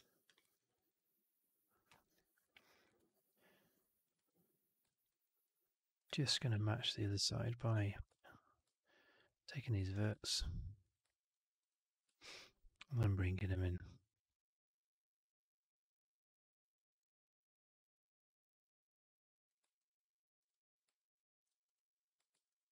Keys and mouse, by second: 0.3 alt+middle click, 0.4 alt+right drag, 0.6 alt+right drag, 0.8-1.6 alt+drag, 1.8 alt+middle drag, 1.9 alt+right drag, 2.3 alt+click, 2.6 alt+middle click, 2.7 alt+right click, 3.0 alt+click, 4.4 1, 4.8 middle click, 5.0 right click, 5.3 click, 6.1 w, 7.0 shift+click, 7.2 alt+click, 7.9 click, 8.0 alt+click, 9.1 shift+click, 9.8 shift+click, 10.1 alt+click, 11.5 shift+click, 12.1 alt+click, 12.9-19.4 drag, 19.7 alt+click, 21.5 click, 22.4 alt+middle click.